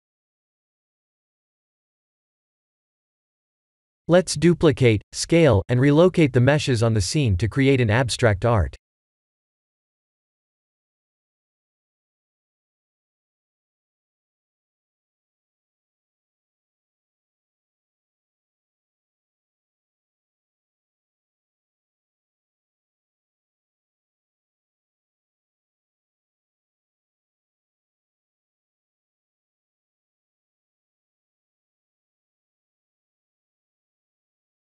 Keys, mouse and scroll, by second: 0.4 middle click, 1.5 KP_1, 3.9 click, 5.1 KP_1, 6.3 click, 7.5 g, 9.6 s, 10.9 g, 12.2 s, 13.2 r, 16.2 shift+d, 17.7 r, 20.1 KP_7, 21.0 r, 25.9 g, 28.2 KP_1, 31.2 g, 33.9 click, 34.4 r.